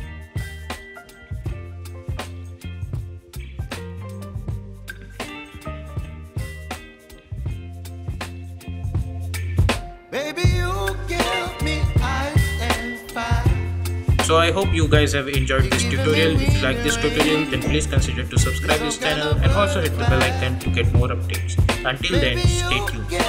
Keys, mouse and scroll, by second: 0.2 space, 0.7 k, 1.6 click, 2.7 Return, 3.3 Return, 3.5 j, 3.8 space, 7.4 space.